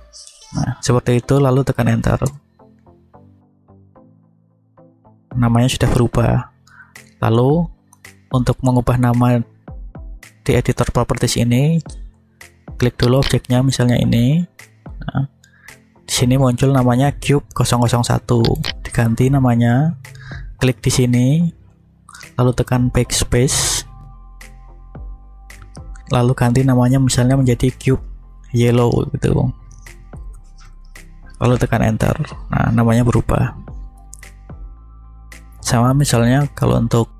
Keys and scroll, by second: 2.1 Return, 23.8 Left, 24.2 Right, 25.0 BackSpace, 30.0 shift+y, 30.2 e, 30.5 l, 30.6 o, 31.8 Return.